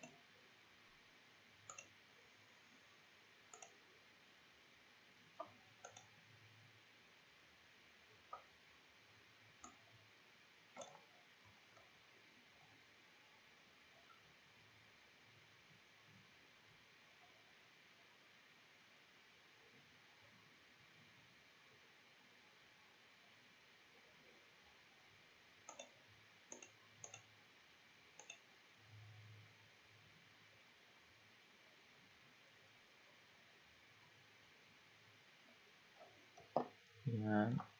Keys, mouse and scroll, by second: 0.5-1.7 scroll down 3, 1.7-4.9 drag, 4.9-5.9 scroll down 3, 5.9-7.1 drag, 7.1-9.6 scroll down 2, 9.6-11.6 drag, 11.6 ctrl+z, 11.9-13.5 scroll down 4, 13.5-15.2 scroll up 12, 15.2-16.5 scroll up 4, 16.5-17.8 scroll up 2, 18.9-20.7 scroll down 4, 20.7-22.8 scroll down 2, 22.8-25.7 scroll down 3, 25.7 click, 26.5 click, 27.0 click, 28.2 click, 30.4-33.8 scroll up 20, 35.2-36.9 scroll up 3, 36.9 middle click.